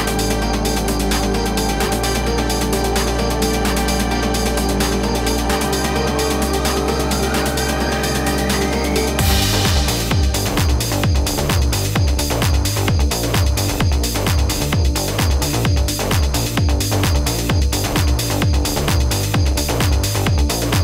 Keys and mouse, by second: 0.4 click, 1.3 click, 2.6 ctrl+=, 3.0 ctrl+z, 4.2 =, 10.3 space, 10.5 click, 11.2 ctrl+-, 11.9 space, 12.2 click, 14.1 click, 15.4 click, 16.1 =, 17.2-18.2 typing, 19.1 click, 19.4 ctrl+=, 20.4-20.8 typing.